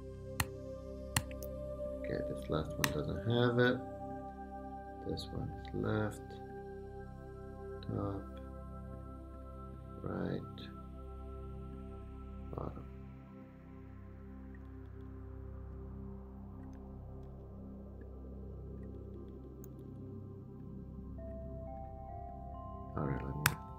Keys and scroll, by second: 2.8 BackSpace, 14.6 Up, 16.7 Right, 17.2 Left, 19.0 Up, 19.7 Down, 23.5 super+g.